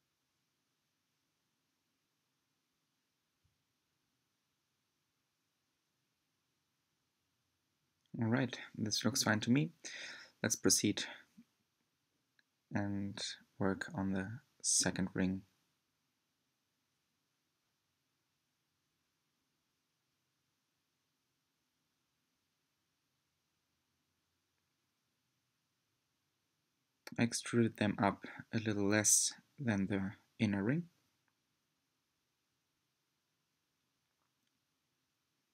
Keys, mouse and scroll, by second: 0.0 click, 0.6 shift+click, 1.2 shift+click, 2.0 shift+drag, 2.7 s, 8.8 click, 9.3 shift+click, 10.5 shift+click, 11.5 shift+click, 12.2 middle click, 13.0-13.5 scroll down 5, 14.9-16.1 middle drag, 16.1 e, 19.0 click, 20.8 g, 22.9-24.0 middle drag, 24.0 click, 24.3 shift+click, 24.6 shift+click, 24.9 shift+click, 25.6 click, 27.6 e, 29.1 middle click, 30.0 click, 30.3 shift+click, 30.6 shift+click, 30.9 shift+click, 31.5 click, 32.4 e, 34.1 middle click, 35.0 click, 35.4 shift+click.